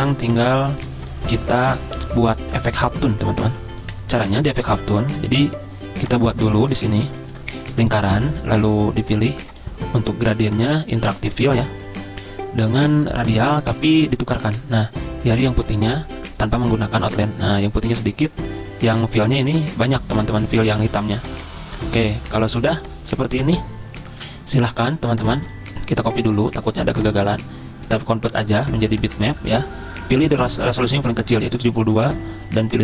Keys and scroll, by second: 24.3 ctrl+z.